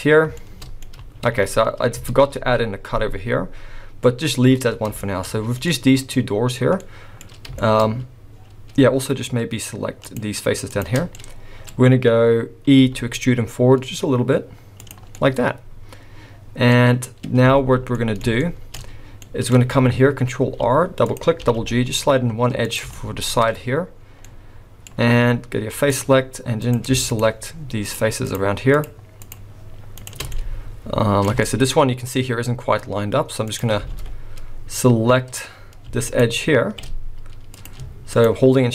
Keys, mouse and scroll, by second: 0.4 shift+middle click, 1.2 ctrl+z, 2.1 ctrl+z, 5.0 shift+middle click, 5.3-5.7 scroll down 3, 5.7 middle click, 6.8 middle click, 7.6 shift+middle click, 7.8-8.4 scroll up 3, 10.1 shift+click, 10.7 shift+click, 11.1 middle click, 11.1 scroll down 1, 11.8-12.8 scroll down 1, 12.8 e, 15.0 scroll down 1, 15.2 middle click, 17.0 scroll up 1, 17.6 alt+a, 18.0 middle click, 18.4 shift+middle click, 18.9 scroll up 1, 19.2 middle click, 19.5-20.2 scroll up 2, 20.4 ctrl+r, 22.9 shift+middle click, 23.9-24.2 scroll down 1, 24.2 middle click, 25.9 click, 26.6 click, 27.1 shift+click, 27.8 click, 28.8 click, 29.2 shift+click, 30.0 shift+click, 30.4 middle click, 31.4 shift+middle click, 33.5 click, 33.9 alt+a, 36.1 alt+shift+click, 37.6 click, 38.1 shift+click.